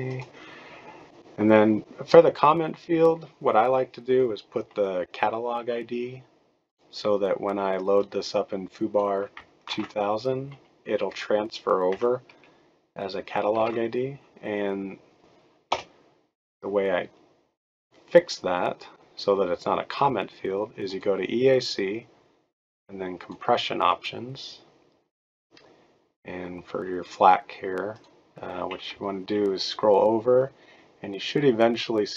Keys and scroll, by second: 2.7-3.4 typing, 9.7 ctrl+c, 13.5 ctrl+v, 15.7 BackSpace, 28.9-32.1 Right.